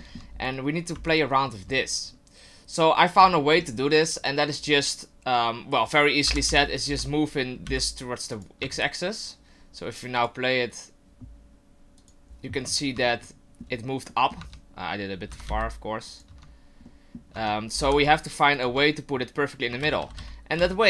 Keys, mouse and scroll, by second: 0.0 shift+middle click, 0.3 scroll up 3, 1.1 alt+right click, 3.4 shift+middle click, 6.3 g, 8.6 Tab, 10.2 click, 12.0 click, 13.1 shift+middle click, 14.1 middle click, 14.4 Tab, 15.3 g, 16.3 Tab, 16.8 middle click, 17.3 Tab, 17.8 g, 18.6 Tab, 19.8-20.1 ctrl+z, 20.6 ctrl+z.